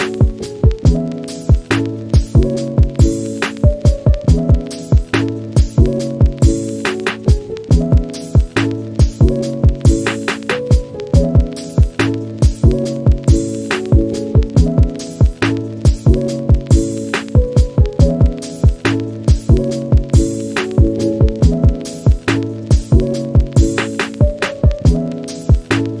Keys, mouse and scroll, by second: 0.0 shift+click, 0.2 scroll down 1, 0.3 middle click, 0.5 scroll up 2, 0.7 shift+click, 1.2 middle click, 1.3 scroll up 2, 1.5 shift+click, 1.9 scroll down 2, 2.0 middle click, 2.4 scroll up 1, 2.6 shift+click, 2.9-3.9 scroll down 1, 3.9-4.3 scroll down 2, 4.7-6.2 middle drag, 6.2 scroll down 1, 6.3 scroll up 2, 6.4 shift+middle click, 6.8 shift+click, 7.0-7.9 scroll down 4, 7.2 shift+click, 7.9 middle click, 8.8 scroll up 3, 9.0 scroll down 2, 9.1-10.4 middle drag, 10.4 click, 10.5 scroll down 4, 10.8-11.3 scroll up 4, 11.1 shift+middle click, 11.4-12.1 middle drag, 12.1 click, 12.5-13.2 shift+middle drag, 13.2 scroll up 1, 13.3 Tab, 13.6 2, 13.8 alt+click, 14.1-14.5 middle drag, 14.5-14.8 scroll up 2, 14.7 shift+middle drag, 14.9-15.4 middle drag, 15.4 click, 16.3-16.9 middle drag, 16.9 r, 17.3-17.8 middle drag, 17.8 scroll down 1, 17.9 shift+middle click, 18.2-18.6 scroll up 1, 18.6 alt+Left, 18.8-20.1 middle drag, 20.1 r, 20.5 click, 20.8 scroll down 1, 21.0 middle click, 21.1 scroll up 1, 21.4 shift+middle drag, 22.0 2, 22.0 alt+click, 22.4 r, 22.9 click, 23.3-23.9 middle drag, 23.9-25.0 scroll down 2, 24.0 Tab, 25.0 click, 25.1 shift+middle click, 25.2 scroll up 2, 25.4-26.0 middle drag.